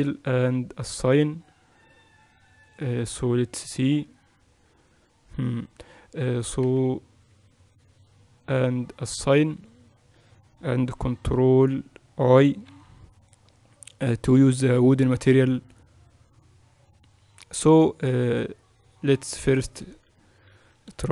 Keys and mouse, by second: 0.1 e, 1.5-7.9 drag, 7.9 ctrl+KP_Subtract, 10.2-12.0 drag, 13.3 ctrl+i, 15.3-18.0 drag, 18.0-20.3 middle drag, 20.3 click.